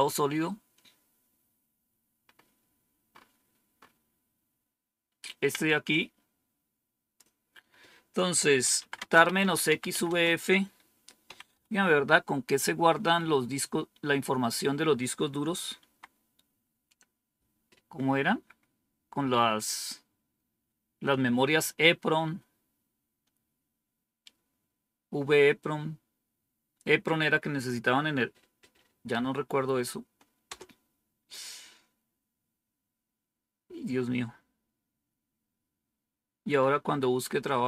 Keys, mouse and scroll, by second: 3.0 scroll up 1, 5.8-7.1 drag, 8.2-11.4 typing, 15.7 Tab, 30.4 Return.